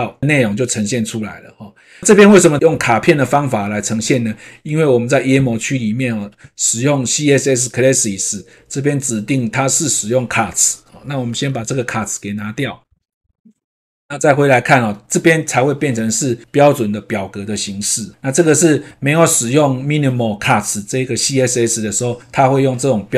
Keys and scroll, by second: 11.4 shift+Right, 13.7 shift+BackSpace.